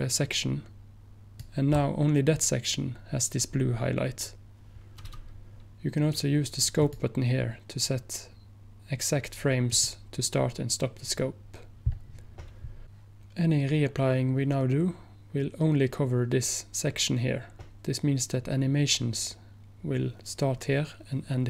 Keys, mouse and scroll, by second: 6.9 click, 11.7 click.